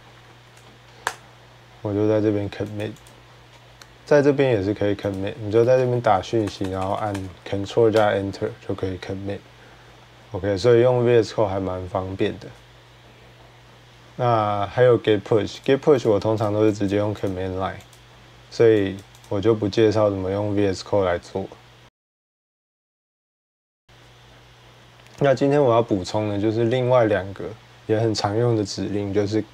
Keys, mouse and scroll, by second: 2.6 Return, 4.0 typing, 4.9 click, 5.1-7.0 typing, 7.7 ctrl+Return, 15.4 click, 15.9 click, 16.3 click, 16.7 click, 17.1 click, 17.8 click, 18.8 click, 19.0 click, 23.9 click.